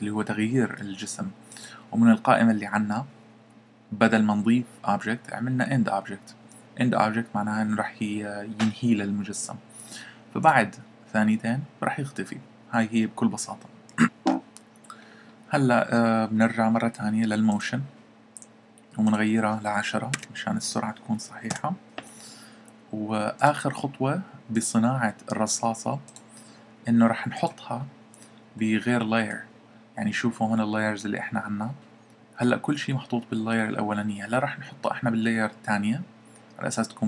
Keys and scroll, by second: 20.1-20.6 typing.